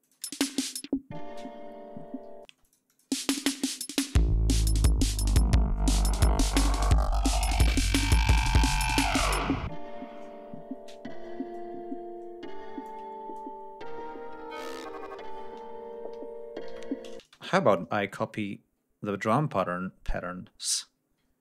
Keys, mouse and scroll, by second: 0.0 space, 1.4 ctrl+scroll down 2, 2.4 ctrl+space, 2.5 ctrl+click, 4.6 ctrl+scroll up 2, 8.9 g, 9.2-9.7 scroll up 2, 10.4 scroll down 2, 11.6-12.3 scroll down 4, 12.7-14.8 ctrl+drag, 15.5-16.0 scroll up 4, 16.6 Delete, 17.1 space, 20.6-21.1 ctrl+scroll up 4.